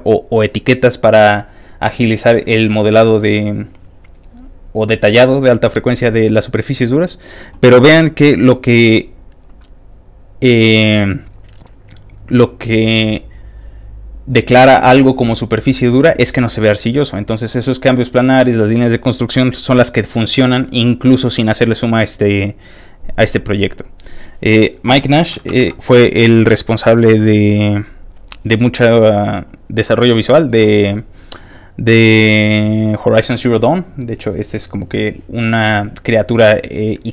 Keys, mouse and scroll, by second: 23.3 click, 27.8 ctrl+shift+t, 27.8 shift+click, 28.9-29.7 scroll down 3, 31.7 middle click, 33.5 middle click, 34.4 click, 37.0-37.1 scroll up 1.